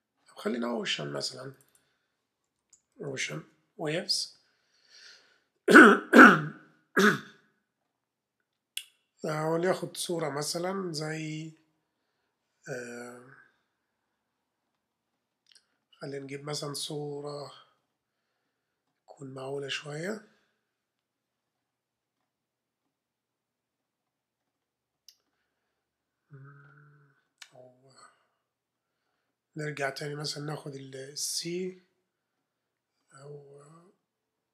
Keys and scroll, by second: 2.2-3.6 typing.